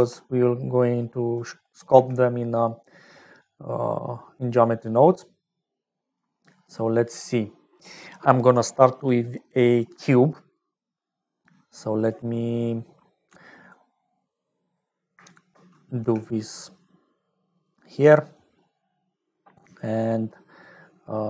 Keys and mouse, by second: 0.0 ctrl+x, 0.8 click, 1.3 click, 1.9 g, 4.3 click, 5.2 click, 12.6 click, 13.7 click, 15.4 shift+click, 16.0 g, 18.1 click, 18.9 click, 21.0 shift+click.